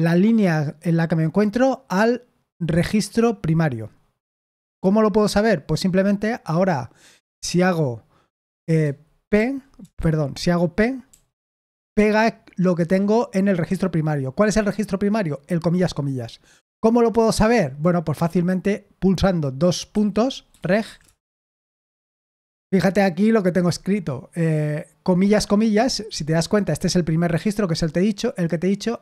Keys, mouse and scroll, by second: 7.4 o, 9.3 p, 9.9 Escape, 20.2-21.3 typing.